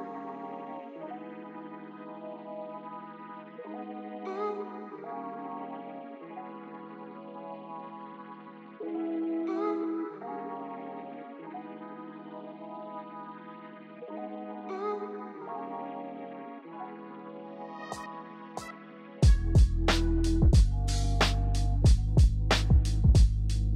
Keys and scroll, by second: 0.0 ctrl+t, 1.0-3.9 typing, 4.3 ctrl+t, 4.5 ctrl+j, 5.3 ctrl+t, 6.0 Delete, 6.1 Delete, 9.1 b, 10.4 v, 13.8 ctrl+i, 13.9-20.4 typing, 15.3 ctrl+i, 21.4 ctrl+l, 22.1 ctrl+z, 22.2 ctrl+z, 22.7 ctrl+j, 22.9 ctrl+u, 23.0 v, 23.2 ctrl+t.